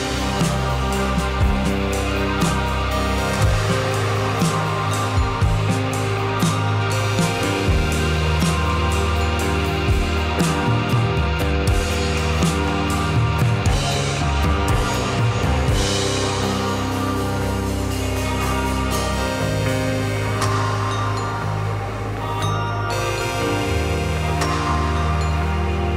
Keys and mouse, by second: 1.0 Tab, 2.4 x, 3.5 Tab, 4.2 click, 5.9-6.4 drag, 7.3 shift+click, 7.6-8.4 middle drag, 8.9 shift+click, 9.2 shift+click, 9.4-10.3 middle drag, 10.9 shift+middle click, 14.5 middle click, 14.5 /, 15.1 middle click, 15.4-16.7 middle drag, 17.8 Tab, 18.4-19.5 drag, 20.3-21.8 drag, 22.7-24.3 drag, 25.0-25.6 drag.